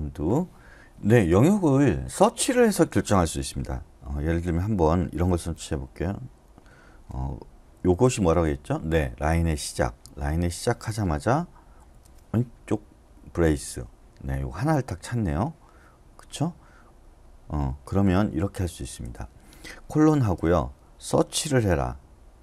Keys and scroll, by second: 5.3 /, 7.7 shift+6, 11.8 shift+[, 18.2 BackSpace, 18.6 BackSpace, 19.0 BackSpace, 20.1 :.